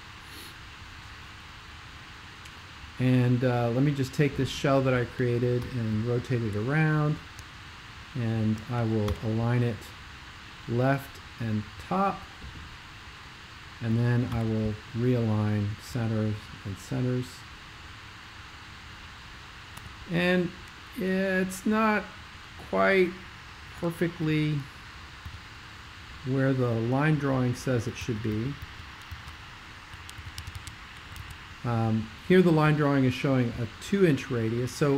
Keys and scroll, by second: 5.7 super+l, 5.9 super+l, 9.1 super+=, 14.4 super+=, 19.8 c, 25.4 x, 28.0 super+2, 28.3 super+2, 28.9 super+2, 30.1 super+1, 30.3 super+1, 30.5 super+1.